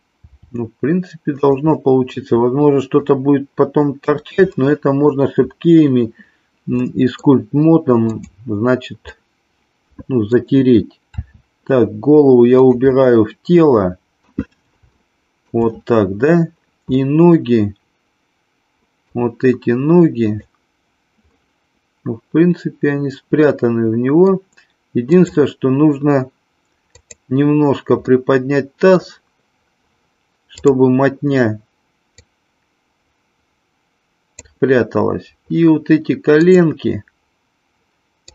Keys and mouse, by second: 0.2 r, 1.7-3.1 middle drag, 4.6-5.1 middle drag, 6.9 middle click, 9.2-10.4 middle drag, 11.0 r, 12.9-14.3 middle drag, 15.0-15.5 shift+middle drag, 17.1-19.2 middle drag, 20.2 click, 21.3-24.3 middle drag, 25.1 click, 26.9 click, 28.1-29.1 middle drag, 30.6 click, 32.3-34.4 drag, 36.4 click.